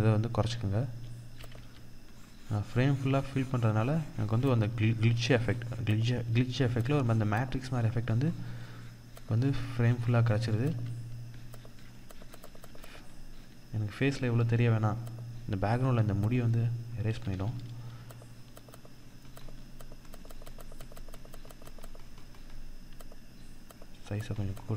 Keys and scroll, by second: 0.9 ctrl+=, 2.0 ctrl+=, 3.9 ctrl+-, 5.3 ctrl+-, 10.1 ctrl+=, 12.6 ctrl+=.